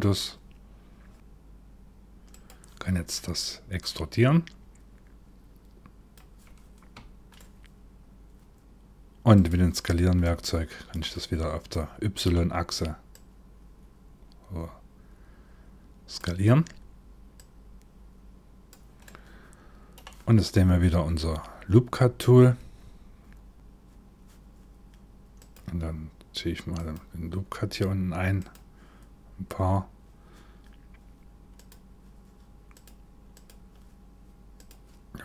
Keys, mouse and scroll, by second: 1.9 click, 3.4 click, 7.0 shift+middle click, 8.9 click, 9.9 middle click, 11.3 middle click, 12.7 click, 16.9 click, 18.7 middle click, 23.5 click, 25.0 click, 26.4 click, 28.0 click, 31.2 click, 32.9 click, 34.2 click.